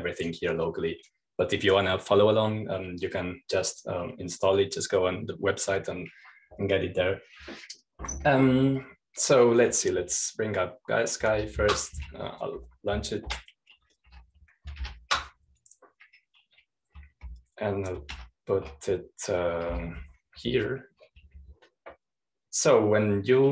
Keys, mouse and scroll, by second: 0.0-1.3 drag, 1.7-3.7 drag, 4.7-6.7 scroll down 1, 10.4-10.9 scroll down 1, 10.9-12.9 scroll up 1, 12.9 super+-, 14.1 Up, 14.8 Return, 16.3 super+-, 19.7 shift+super+Right, 21.3 super+t.